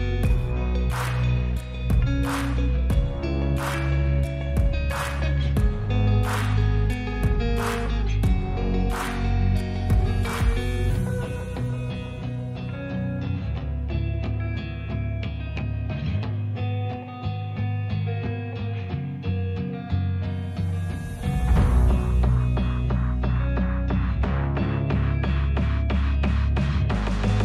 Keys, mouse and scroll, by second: 1.6 shift+a, 3.4 g, 3.6 middle click, 4.3 ctrl+z, 4.7 g, 4.9 middle click, 5.6 ctrl+z, 6.1 click, 6.6 g, 6.8 middle click, 7.6 g, 8.4 middle click, 11.3 click, 12.0-13.7 drag, 14.1 i, 14.8 i, 17.3 click, 17.6 click, 18.8 i, 20.5 click, 20.7 space, 21.6 ctrl+space, 21.7 ctrl+z, 22.3 click, 22.5 click, 22.9 Delete, 24.6 g, 26.1 click, 27.0 i.